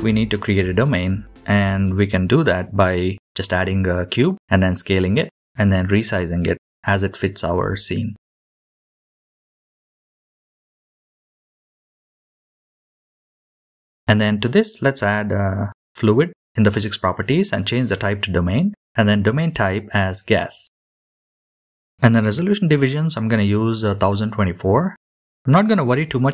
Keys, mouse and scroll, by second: 0.0 shift+middle click, 0.1 click, 0.7-1.3 scroll down 4, 0.9 shift+a, 1.3 shift+middle click, 1.5 click, 1.7 s, 2.4-2.8 scroll down 4, 2.7 g, 3.4 s, 4.0 g, 4.7 scroll up 3, 4.9 shift+middle click, 5.1 shift+middle drag, 5.3 middle click, 5.4 scroll down 6, 5.5 middle click, 5.7 s, 6.2 middle click, 6.3 KP_3, 6.4-6.9 scroll up 6, 6.6 shift+middle click, 6.9 shift+middle click, 7.5 g, 8.4 middle drag, 8.5-9.2 scroll down 6, 8.6 middle click, 8.9 middle click, 9.2 click, 9.5 click, 9.6 g, 9.9 middle click, 10.2 click, 10.3 middle click, 10.5 scroll up 8, 10.5 shift+middle click, 10.8 shift+middle click, 11.0 middle drag, 11.7 scroll down 5, 11.9 middle click, 12.0 n, 12.1 click, 13.0-13.5 middle drag, 13.5 click, 13.7 n, 13.8 scroll down 2, 13.9 scroll up 2, 14.2 click, 14.4 click, 16.1 click, 16.8-18.1 drag, 22.3-26.3 drag.